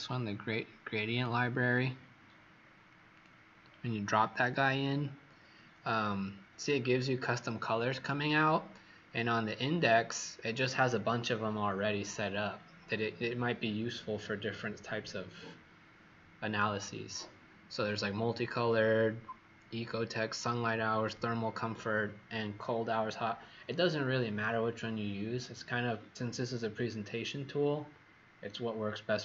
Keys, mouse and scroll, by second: 2.2-2.9 scroll down 3, 3.1 click, 4.8-5.7 scroll up 1.